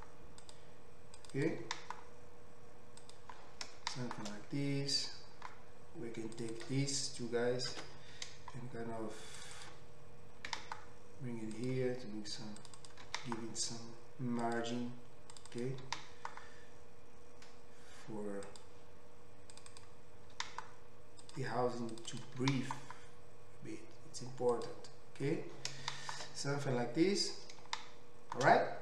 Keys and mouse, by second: 1.3 click, 1.4-6.6 middle drag, 1.6 g, 6.6 click, 7.8 ctrl+x, 9.4 click, 9.6 click, 10.6 g, 12.8 click, 13.1 g, 15.5 click, 15.8 g, 19.7 click, 20.4 g, 22.0 middle click, 22.1 click, 22.2-28.8 middle drag, 22.6 g.